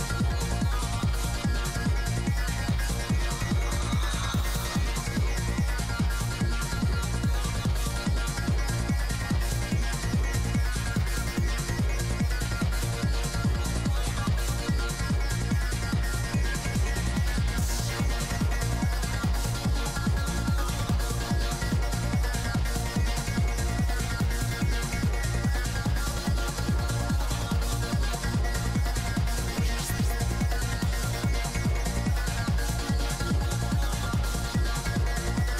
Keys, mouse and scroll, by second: 2.8-5.0 drag, 3.5-5.0 middle drag, 5.0 g, 5.3 f, 5.4-6.4 middle drag, 5.6 f, 6.3-7.3 drag, 6.8 f, 7.3 f, 7.7-10.2 drag, 8.3 f, 10.2-13.1 middle drag, 12.6 i, 13.1 click, 13.1 f, 13.5 middle click, 14.2-16.9 drag, 17.3 g, 17.5 f, 17.8 f, 18.4 click, 20.4-23.6 drag, 21.4 f, 23.2 i, 23.6 f, 23.8 middle click, 24.0 f, 24.2 f, 24.6 click, 25.2 middle click, 25.6 click, 26.1-27.6 middle drag, 27.4 g, 27.5 f, 27.8-33.7 drag, 28.7 f, 29.9-31.0 middle drag, 31.0 f, 31.4 right click, 32.6 f, 33.8 middle click, 34.0 f, 34.5 f, 34.8 f, 35.2 f, 35.3 click.